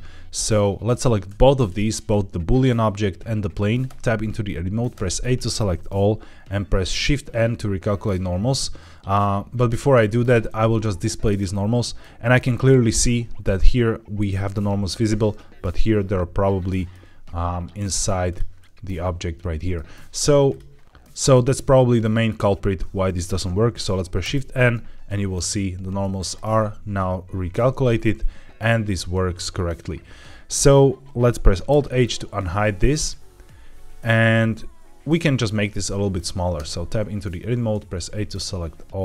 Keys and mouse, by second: 3.8 Tab, 4.8 a, 9.8 q, 11.4 middle click, 13.5 middle click, 15.7-16.8 middle drag, 18.5-19.6 middle drag, 20.4 click, 20.7 middle click, 21.0 middle click, 22.0 middle click, 24.1 shift+n, 25.6 q, 27.5 Tab, 31.6 alt+h, 32.8 click, 36.5 Tab, 37.6 a.